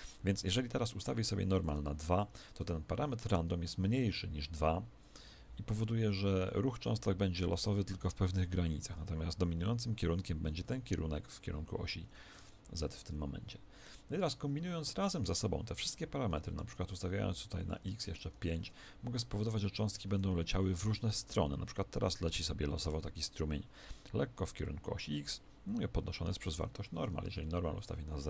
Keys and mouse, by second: 0.5 Escape, 1.5 click, 8.1 alt+a, 12.0 Escape, 17.5 click, 19.4 middle click, 20.1 alt+a, 26.8 Escape, 27.7 click.